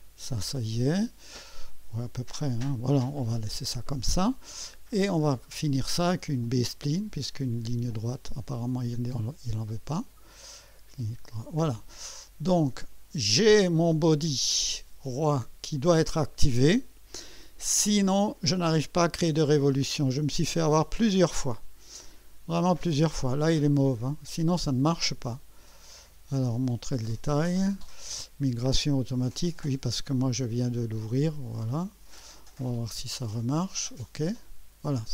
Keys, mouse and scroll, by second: 3.7 right click, 6.4 click, 7.9 click, 9.9 click, 10.8 right click, 11.6 scroll down 1, 12.8 click, 14.5-14.9 scroll up 1, 16.5 right click, 19.1 click, 22.6 click, 24.6 click, 30.9 click, 31.8 click, 32.4 click, 34.2 click, 35.0 Escape.